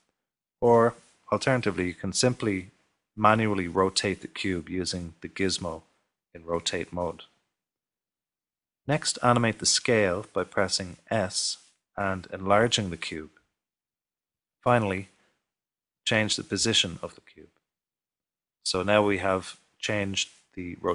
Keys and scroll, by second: 1.5 typing, 13.1 typing, 16.7 typing.